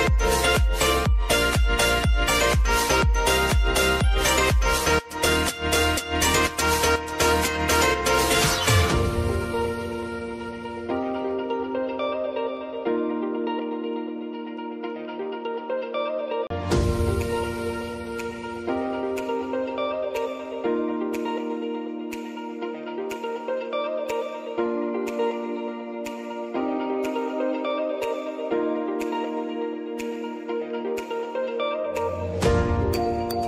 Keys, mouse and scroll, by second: 1.9 click, 4.8 click, 5.3 ctrl+a, 5.9-7.4 typing, 9.5 click, 10.4-11.6 scroll down 1, 11.6-14.7 drag, 14.7-16.9 drag, 16.9-18.0 alt+scroll down 1, 18.0-20.2 drag, 20.2-22.7 drag, 22.7 click, 24.5 s, 25.6-29.1 drag, 29.1 p, 29.8-33.3 drag, 33.3 Down.